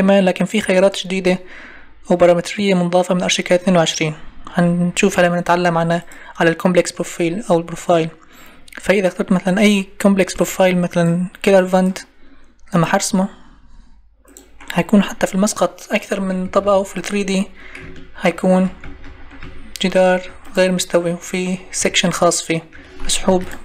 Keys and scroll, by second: 16.4 Escape, 23.3 ctrl+e.